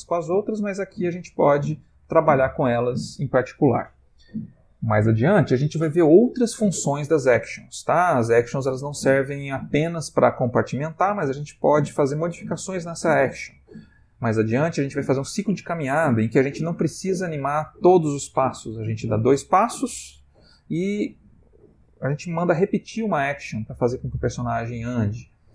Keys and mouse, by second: 0.4 click.